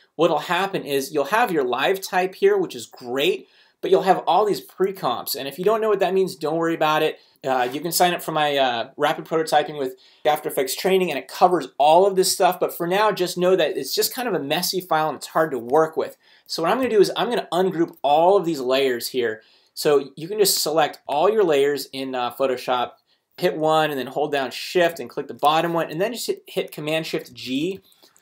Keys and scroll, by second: 26.9 shift+super+g.